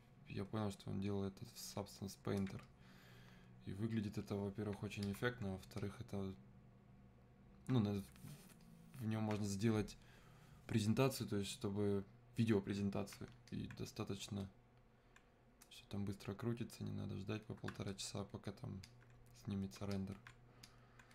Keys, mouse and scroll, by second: 8.6-11.6 alt+drag, 13.5-21.1 alt+drag.